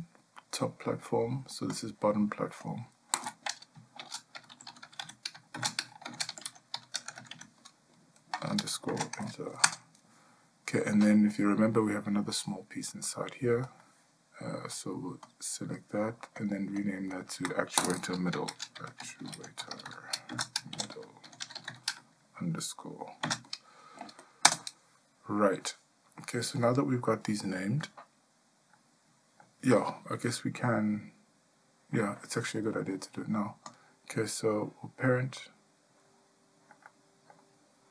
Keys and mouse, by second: 2.7-10.1 drag, 15.3 click, 16.4 click, 17.2-25.1 drag, 21.4 d, 36.9 shift+middle click.